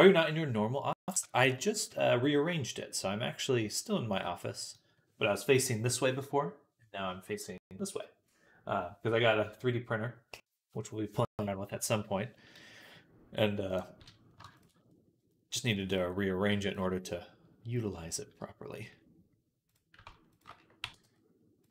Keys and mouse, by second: 1.5 g, 4.4 click, 12.2 click, 14.7 click, 15.9 click, 16.8 middle click, 16.9 middle click, 17.6-21.7 middle drag, 20.2 ctrl+shift+click, 20.7 g.